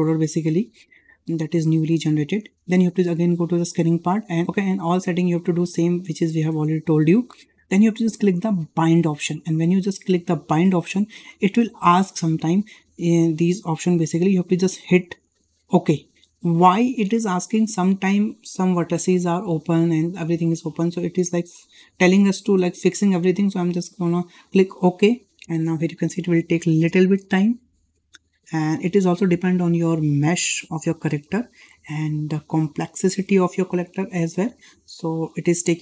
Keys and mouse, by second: 3.6 click, 10.3-35.8 drag.